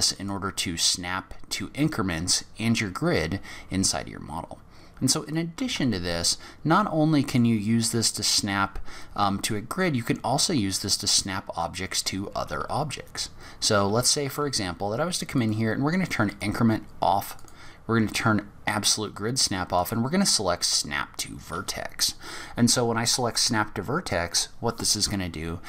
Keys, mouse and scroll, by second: 0.1 click, 5.2 click, 5.7 Tab, 6.1-6.8 scroll down 6, 6.8 middle click, 7.8-8.4 scroll up 4, 8.6 scroll down 2, 9.4 scroll down 1, 9.5 middle click, 10.1-11.0 scroll up 1, 11.0 click, 11.0-11.3 scroll up 1, 11.6 middle click, 12.3 g, 15.4 click.